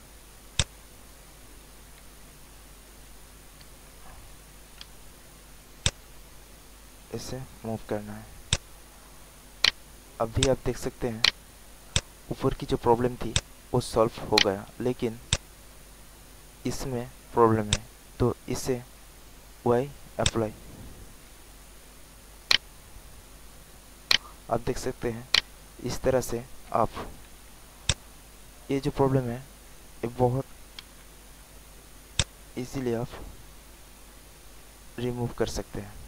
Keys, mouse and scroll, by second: 0.5 click, 2.0 ctrl+alt+z, 3.6 z, 5.8-7.9 drag, 8.4 alt+click, 9.0 alt+middle click, 9.6 alt+right click, 10.4 alt+click, 10.9 alt+middle click, 11.2 alt+right click, 11.9 alt+click, 12.3 alt+right click, 12.9 alt+middle click, 13.3 alt+click, 14.3 alt+right click, 14.8 alt+middle click, 15.3 alt+click, 16.3 alt+middle click, 17.6 click, 22.3 alt+middle click, 22.4 alt+right click, 23.1 alt+middle click, 24.0 alt+right click, 24.8 alt+middle click, 25.3 alt+right click, 27.8 alt+click, 30.8 r, 32.1-35.9 drag.